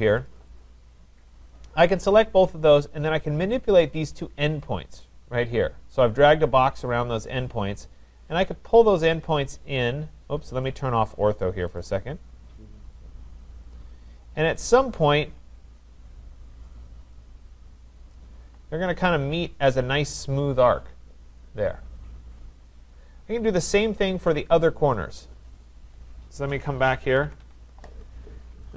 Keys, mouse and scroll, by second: 0.3 click, 1.3-2.9 scroll, 3.9 click, 7.8 click, 10.6 click, 11.8 click, 18.1 click, 24.9 click, 25.6-26.1 scroll, 26.6 scroll, 26.6 middle click, 26.7 middle click, 27.0 Escape, 27.3 Escape, 27.4 Escape.